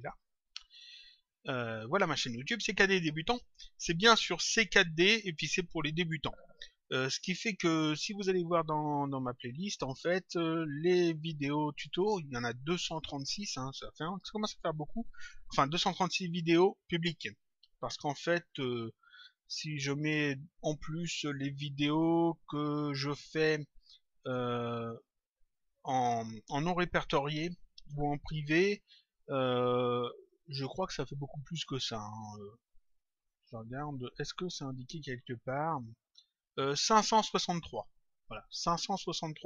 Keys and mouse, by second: 8.5 click, 32.8 click.